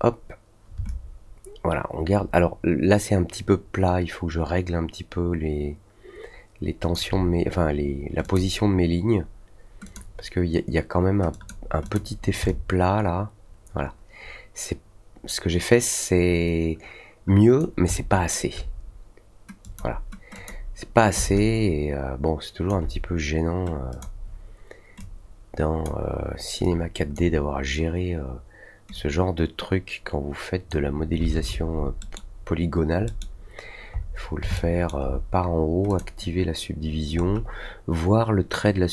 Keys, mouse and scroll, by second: 0.8-6.9 alt+drag, 8.2 click, 9.8 click, 11.3 click, 11.8 click, 12.4-17.5 alt+drag, 17.9-18.3 alt+middle drag, 19.6 click, 20.3 click, 21.3-22.6 alt+drag, 23.9 click, 24.9-25.8 drag, 26.6 click, 28.9 click, 31.9 middle click, 33.0 middle click, 33.9 scroll down 1, 34.5 alt+middle click, 35.8 click, 37.1-37.4 scroll up 1.